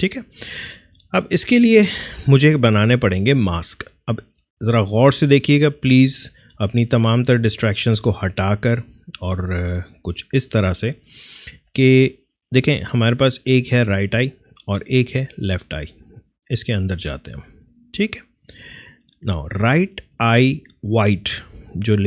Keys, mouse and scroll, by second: 7.1-11.0 drag, 13.4 click.